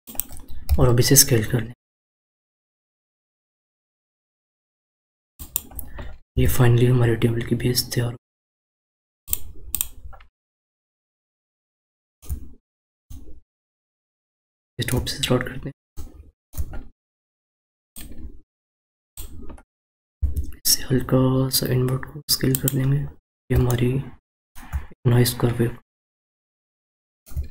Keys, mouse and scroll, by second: 9.7 click, 10.6-11.4 scroll down 4, 11.4-15.2 shift+middle drag, 15.2-15.9 scroll up 4, 15.9 shift+middle click, 16.7 scroll up 2, 17.9 click, 20.1 s, 23.1 scroll down 1, 23.6-26.7 shift+middle drag, 26.8-27.5 shift+middle drag.